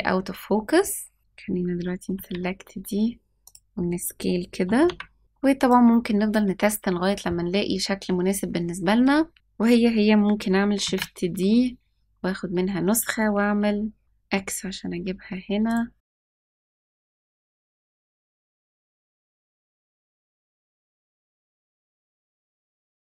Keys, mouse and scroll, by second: 1.2 click, 2.0 s, 4.5 g, 5.2 g, 10.9 shift+d, 16.2-18.8 typing, 16.9 scroll down 5, 17.7 scroll up 5, 17.9 scroll down 2, 20.5-23.1 typing.